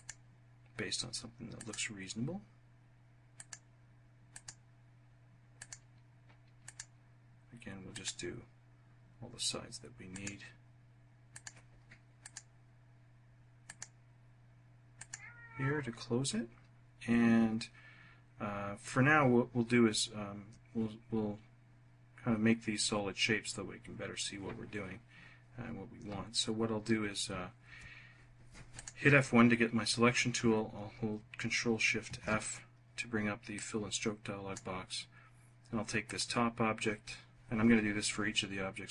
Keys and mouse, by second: 1.4 click, 3.2 click, 4.2 click, 5.4 click, 6.5 click, 7.7 click, 9.9 click, 11.1 click, 12.0 click, 13.5 click, 27.5 F1, 28.5 click, 31.9 ctrl+shift+f, 33.4 click.